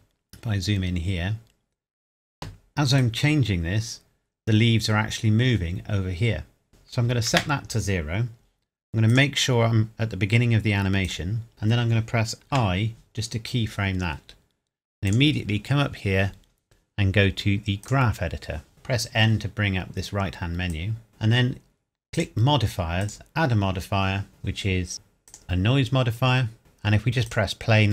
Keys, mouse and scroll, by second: 0.1 scroll up 1, 2.3-3.0 scroll up 1, 3.0 click, 7.1 KP_0, 7.3 KP_Enter, 9.1 click, 9.9-10.7 scroll down 1, 11.0 click, 15.1 click, 17.8 click, 18.7 n, 20.7 click, 22.1 click, 25.3 click, 26.2-27.2 scroll up 1, 27.2 click.